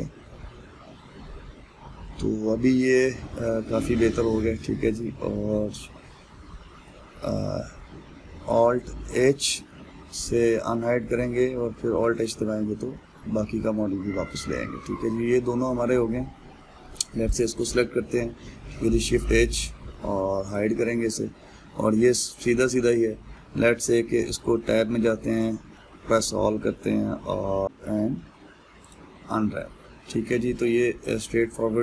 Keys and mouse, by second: 6.4 shift+h, 7.0 shift+h, 8.4 h, 9.7 alt+h, 10.4-11.6 middle drag, 11.6 Tab, 12.6 alt+h, 13.6-18.0 ctrl+middle drag, 18.0 click, 19.7 shift+h, 20.5-23.6 middle drag, 25.2 Tab, 25.6 a, 26.4-27.6 middle drag, 27.6 ctrl+z, 29.5 u.